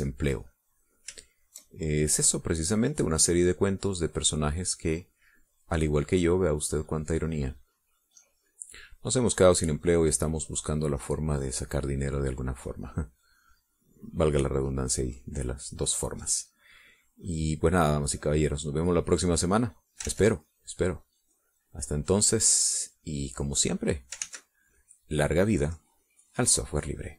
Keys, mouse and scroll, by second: 0.3 shift+click, 0.9-3.1 shift+drag, 3.7-8.8 drag, 9.0-12.9 drag, 13.2-16.3 drag, 17.9 click, 21.4 ctrl+z, 22.0-25.5 drag, 25.6 ctrl+s.